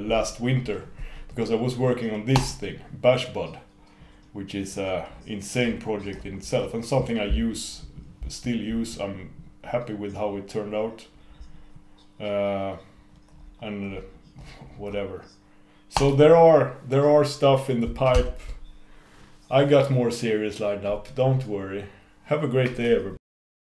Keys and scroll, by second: 18.6 super+n.